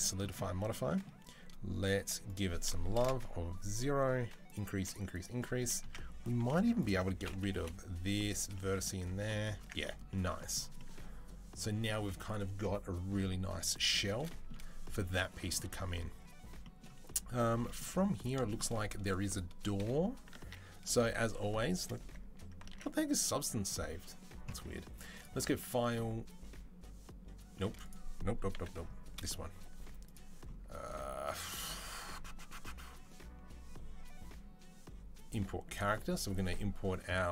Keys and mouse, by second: 5.6 Tab, 6.2 2, 6.7-24.9 alt+middle drag, 7.3 Delete, 9.4 Tab, 19.6 KP_3, 20.2 ctrl+s, 22.8 ctrl+s, 24.9-27.7 drag, 27.7-28.5 middle drag, 28.3 n, 28.9-29.8 middle drag, 28.9 n, 29.8 click, 29.9-35.6 middle drag, 35.6-37.3 drag.